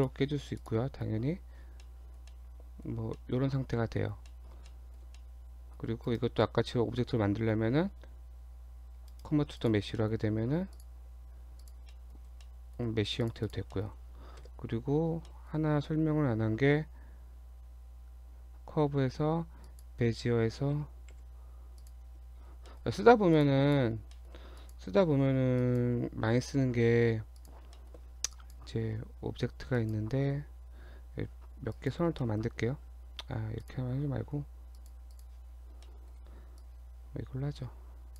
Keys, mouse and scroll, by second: 0.0 click, 0.6 click, 1.8 middle click, 2.3 middle click, 2.9 scroll down 1, 3.1 middle click, 4.0 scroll down 1, 4.3 middle click, 4.7 shift+middle click, 5.1 shift+middle click, 5.2 middle click, 6.0 right click, 10.0 middle click, 10.8 click, 11.1 Tab, 11.6 click, 12.0 middle click, 12.2 scroll up 1, 12.4 middle click, 12.9 Tab, 13.2 click, 13.4 click, 13.7 middle click, 14.4 KP_7, 15.3 shift+middle click, 16.6 shift+a, 20.2-21.1 scroll down 2, 21.1 g, 22.1 Tab, 22.4-23.4 scroll up 5, 22.7 shift+middle click, 23.4 click, 23.7 click, 24.1 shift+middle click, 24.6 click, 25.1-25.5 scroll down 1, 25.6 click, 26.6 g, 27.8 shift+middle click, 28.3 click, 29.8 shift+click, 31.8 click, 32.2 shift+middle click, 33.6 click, 34.8 click, 35.1 click, 35.5 scroll down 1, 35.9 shift+middle click, 36.6 click.